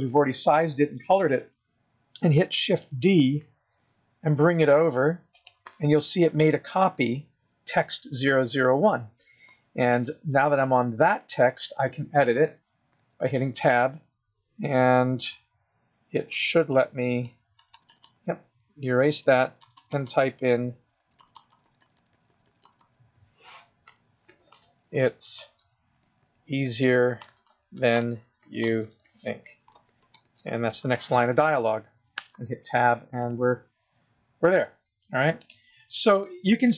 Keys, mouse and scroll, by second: 3.3 shift+d, 6.7 scroll down 4, 13.3 Tab, 16.6-22.9 typing, 24.3-30.5 typing, 30.9 Return, 32.4 Tab, 33.4 click, 34.6 click, 35.6 click.